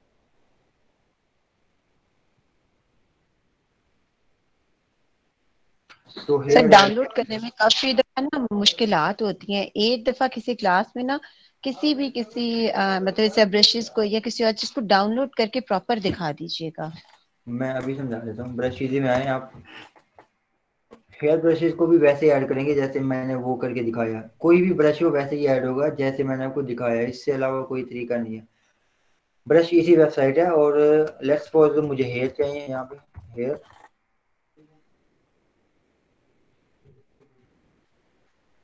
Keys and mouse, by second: 17.8 click, 18.6-19.6 typing, 21.2 click, 31.0 click, 32.1-33.8 typing.